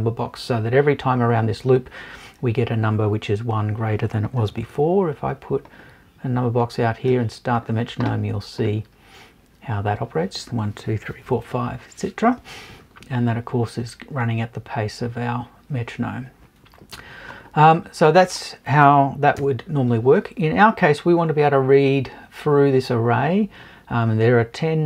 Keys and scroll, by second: 19.4 BackSpace.